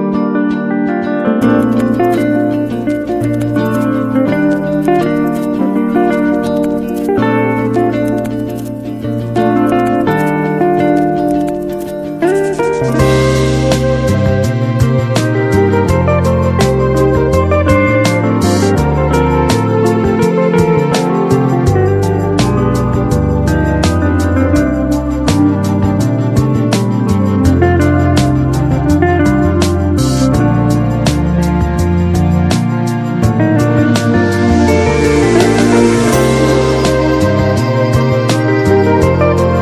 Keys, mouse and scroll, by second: 1.6 ctrl+w, 12.7 ctrl+w, 14.9-16.3 drag.